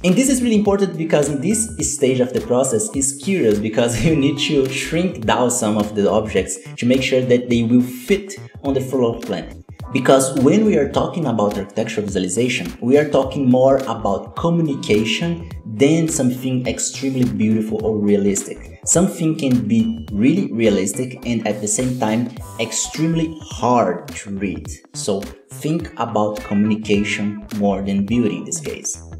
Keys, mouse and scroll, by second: 0.0 shift+middle click, 0.2-1.1 scroll up 7, 0.5 right click, 0.6 shift+middle click, 1.1 alt+a, 1.5 click, 1.6 KP_Decimal, 1.8 middle click, 2.0-2.3 scroll up 7, 2.0 Tab, 2.1 middle click, 2.3 scroll down 1, 2.4-2.8 middle drag, 2.8 KP_7, 2.9 scroll down 3, 3.1 scroll up 1, 3.2-3.8 scroll down 1, 5.2-5.8 scroll down 3, 6.8-7.1 scroll down 8, 7.1 shift+middle click, 7.2 scroll up 3, 7.5 scroll down 4, 7.6 shift+middle click, 7.7-8.1 scroll up 5, 8.2 scroll down 1, 8.3 shift+middle click, 8.4 scroll up 1, 8.6-9.0 scroll down 2, 8.7 shift+middle click, 9.0 shift+middle click, 9.1-9.7 scroll up 4, 9.4 shift+middle click, 9.7 right click, 9.8 scroll down 2, 9.9 alt+a, 10.0-10.5 scroll up 4, 10.5-18.2 shift+middle drag, 18.2-18.5 scroll down 1, 18.5 shift+middle click, 18.7 scroll up 1, 18.9 shift+middle click, 19.2 s, 19.7 scroll down 4, 19.9 KP_1, 20.1 shift+middle click, 20.2 scroll up 1, 20.3 alt+a, 20.4 click, 20.8 middle click, 21.0 alt+a, 21.1 middle click, 21.1 scroll down 3, 21.4 KP_1, 21.5 scroll up 3, 21.6 b, 22.1 scroll up 3, 22.1 shift+middle click, 22.3 alt+a, 22.5 b, 22.7 KP_Decimal, 22.8 middle drag, 23.0 scroll down 7, 23.2 middle click, 23.4-23.8 scroll up 5, 23.5 middle click, 23.8-26.2 typing, 25.1 scroll down 2, 25.2 middle click, 25.4 middle click, 25.4 scroll up 1, 26.0-26.6 scroll down 12, 26.6 shift+middle click, 26.6 scroll up 2, 26.7-27.9 shift+middle drag, 27.9 right click, 28.0 KP_Divide, 28.1 scroll up 10, 28.2 shift+middle click, 28.4 scroll down 1, 28.5 shift+middle click, 29.0 scroll down 1, 29.0 shift+middle click, 29.1 scroll up 1.